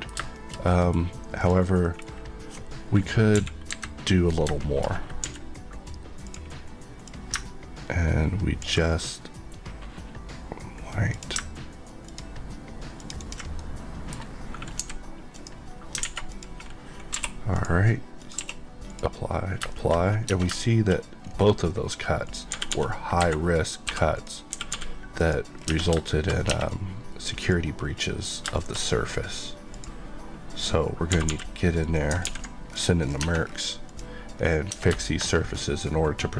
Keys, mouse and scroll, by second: 0.5-1.0 scroll up 2, 0.6 middle click, 1.4 click, 1.8 middle click, 2.0 scroll up 1, 3.3 KP_1, 3.6 KP_3, 4.5 shift+middle click, 4.8-5.2 shift+scroll up 2, 5.2 d, 6.2 click, 7.4 ctrl+click, 8.4 ctrl+click, 12.0 click, 13.2 click, 13.5 middle click, 14.8 x, 15.3 click, 16.0 alt+a, 16.2 click, 17.1 q, 17.5 click, 18.3 click, 18.3 q, 18.9 click, 19.7 middle click, 19.9 scroll up 1, 20.6 middle click, 20.9 scroll up 1, 21.6 scroll up 1, 22.2 click, 22.5 typing, 23.1 Escape, 23.8 Escape, 24.1 click, 24.5 typing, 25.1 click, 25.5 Tab, 26.1 shift+middle click, 26.3 shift+scroll up 1, 26.5 shift+Tab, 27.3 shift+click, 28.5 shift+middle click, 28.7 scroll up 1, 29.7 click, 31.1 typing, 31.8 right click, 32.2 ctrl+x, 32.6 scroll down 1, 33.2 Tab, 33.4-33.8 scroll down 1, 33.8 click, 34.3 scroll, 34.3-34.7 scroll up 1, 34.7 Tab, 35.0 shift+middle click, 35.1 shift+scroll up 2.